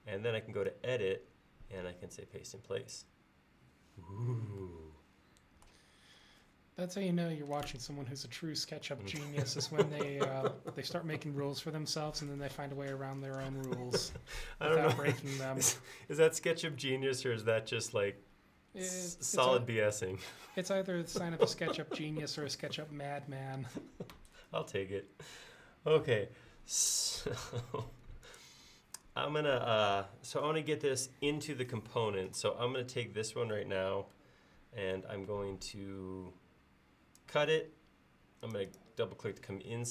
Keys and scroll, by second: 26.1 Escape, 27.3 Escape, 27.4 Escape.